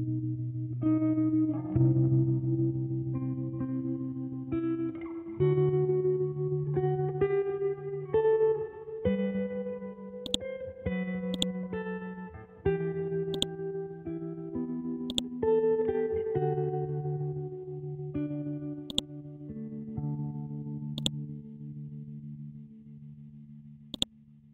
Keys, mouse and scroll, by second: 0.6-4.4 typing, 5.8 e, 7.4-8.6 typing, 10.2-13.3 drag, 16.2 scroll down 1, 17.2-18.5 scroll up 1, 18.9-24.5 drag.